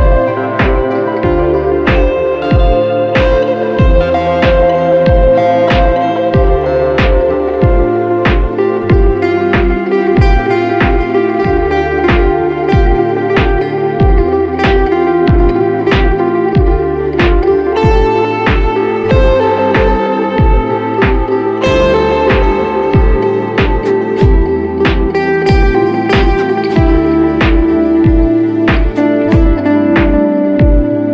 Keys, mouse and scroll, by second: 13.2 alt+right click.